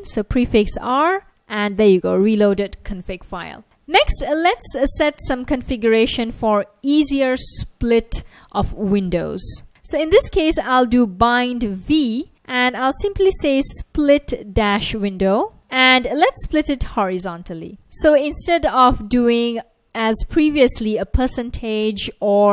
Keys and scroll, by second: 0.2 ctrl+a, 0.8 r, 4.4 super+Tab, 9.5 Return, 9.9-17.1 typing.